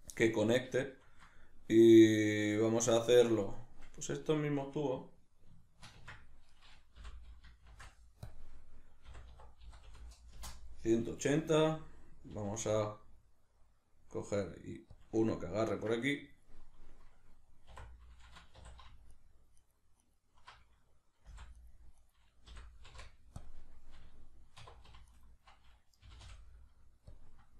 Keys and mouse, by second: 3.5 right click, 6.0 Tab, 6.5 right click, 7.0 l, 8.3 click, 9.1 r, 15.1 click, 15.3-19.1 ctrl+middle drag, 17.7 3, 18.6 2, 19.1 alt+right click, 19.6 alt+right click, 20.0 alt+right click, 21.3 v, 22.0 right click, 22.5 l, 25.1 alt+right click, 26.0 g, 27.2 click.